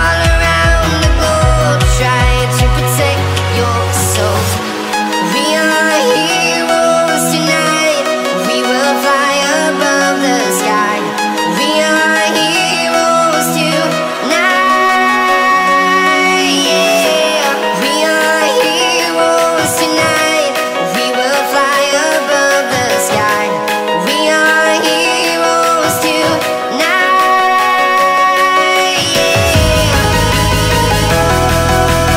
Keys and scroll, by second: 3.9-4.9 space, 7.7-10.3 typing, 12.7 ], 14.8 [, 17.8 ctrl+z, 20.3 ctrl+z, 23.6-27.2 typing, 28.9 ctrl+z, 29.0 ctrl+z, 31.0 [.